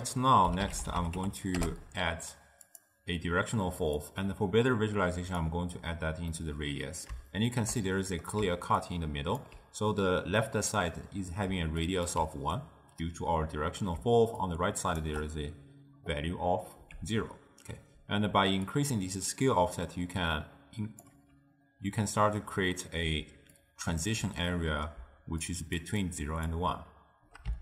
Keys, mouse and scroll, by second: 4.1-6.4 drag, 6.4-8.5 middle drag, 8.5 d, 8.9-9.4 drag, 9.4 d, 11.6 d, 11.9 click, 12.1 d, 12.2 d, 12.3 d, 14.1 d, 14.5-15.1 drag, 15.1 d, 18.8-21.9 drag, 23.3-26.8 typing, 23.6-24.1 drag, 25.6 click, 26.2 click.